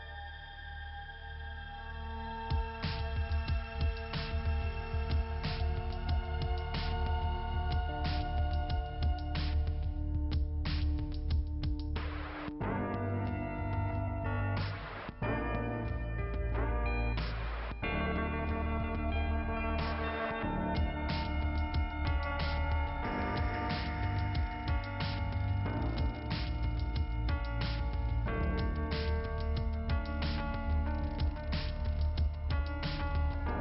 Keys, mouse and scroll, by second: 1.1 click, 1.5 click, 3.8 click, 5.8 click, 6.4 click, 8.0 click, 9.7 click, 11.7 click, 12.5 click, 12.9 click, 13.2 c, 14.9 b, 15.7 h, 16.2 h, 16.9 h, 18.0 Return, 19.5 click, 21.2 click, 22.9 click, 23.9 click, 24.4-27.2 typing, 28.0 Return, 28.7 Return, 30.5 click, 31.1 click, 32.4 click, 32.9 click.